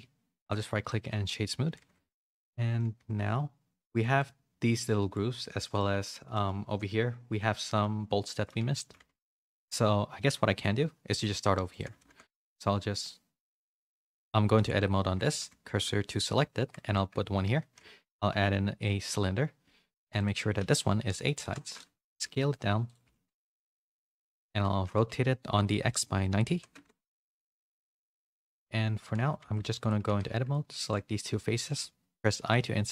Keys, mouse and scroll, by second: 0.5 right click, 1.0 middle click, 1.6 a, 1.8 a, 2.0 shift+middle click, 2.3 middle click, 2.8 a, 3.0 a, 4.0 middle click, 5.0 middle click, 5.6 middle click, 6.3 middle click, 8.2 middle click, 8.7 shift+middle click, 9.1 a, 9.2-10.3 middle drag, 10.5 click, 11.2 Tab, 11.5 3, 11.7 click, 12.0 shift+s, 14.4 Tab, 15.0 Tab, 15.6 shift+s, 16.8 Tab, 17.5 shift+a, 20.1-21.6 drag, 22.8 s, 23.0 s, 24.1 r, 28.3 z, 29.0 z, 29.4 Tab, 29.8 click, 29.8 3, 30.0 z, 30.7 shift+click, 31.2 z, 32.3 i.